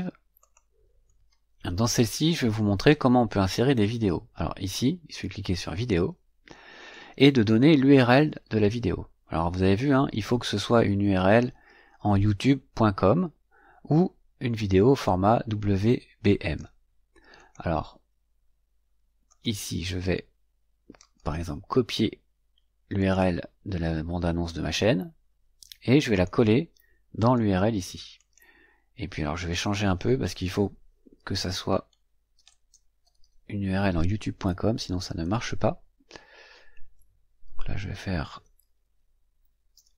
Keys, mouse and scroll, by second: 0.3 click, 5.6 click, 15.0-16.7 drag, 17.3 click, 19.2 click, 20.9 right click, 22.9 click, 26.0 click, 27.1 right click, 28.1 click, 29.2 click, 30.9-33.6 typing, 34.2 Delete, 36.7 Right, 37.8-39.6 typing.